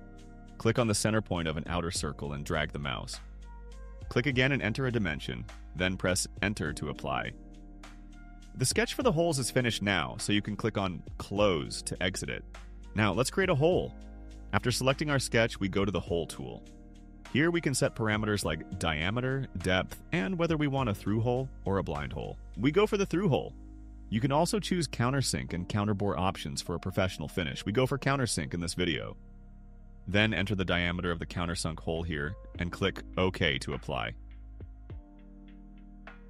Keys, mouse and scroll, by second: 2.0 click, 3.8 click, 5.0 2, 5.4 5, 7.1 Return, 11.0 click, 15.9 click, 18.7 click, 20.9 click, 23.6 click, 27.3 click, 29.2 click, 30.9-31.8 typing, 32.2 click, 35.8 click.